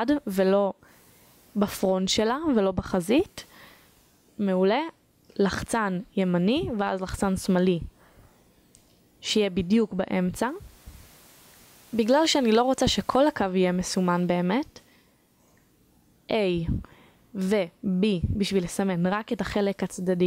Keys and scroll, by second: 14.0 a, 16.9 b.